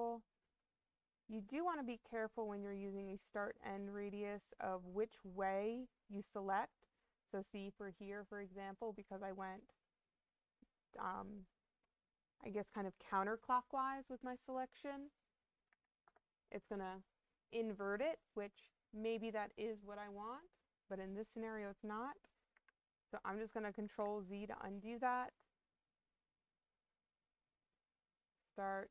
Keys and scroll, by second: 15.6 2, 15.9 Return, 22.4 Escape, 23.7 ctrl+z.